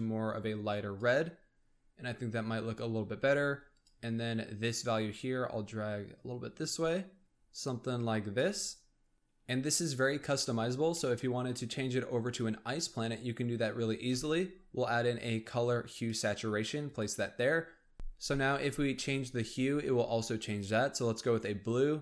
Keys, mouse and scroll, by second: 1.3-1.9 scroll down 2, 1.9-3.8 scroll up 1, 3.8-4.8 drag, 9.0-9.4 scroll down 2, 10.4-10.9 scroll up 1, 10.9-12.9 middle drag, 12.9 click, 14.1 shift+a, 17.4-17.9 scroll up 2, 19.2-22.0 drag.